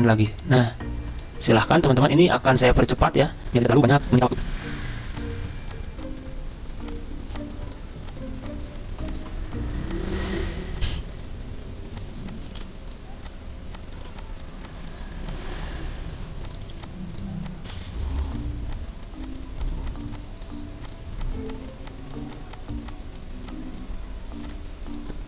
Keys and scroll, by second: 12.5 ctrl+z, 14.0 ctrl+z.